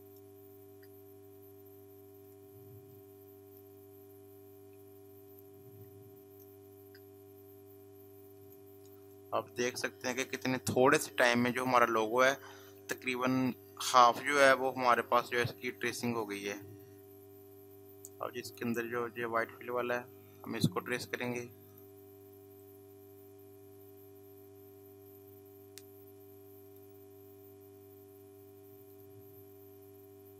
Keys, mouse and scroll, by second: 2.2 click, 2.7 space, 2.9 click, 3.2 space, 5.3 click, 5.8 space, 6.0-8.2 drag, 8.2 click, 11.8 space, 12.1 click, 12.4 space, 16.1 click, 20.4 click, 25.0 click, 28.9 click.